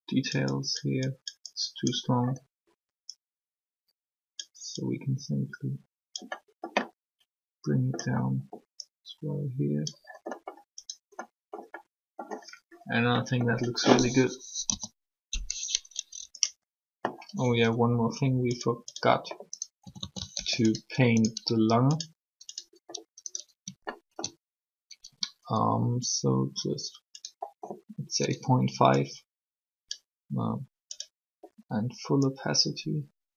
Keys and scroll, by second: 14.4 3, 19.8 typing, 20.3 alt+r.